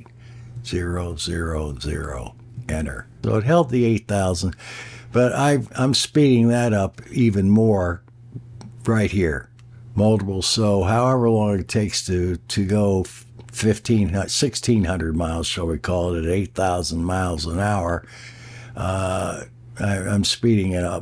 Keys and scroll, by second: 0.6 0.